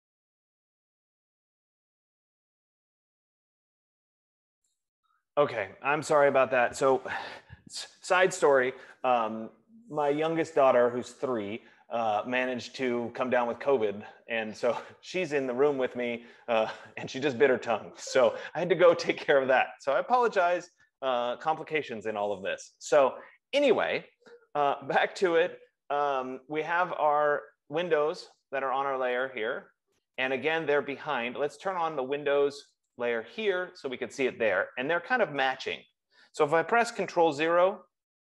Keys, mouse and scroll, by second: 33.1 click.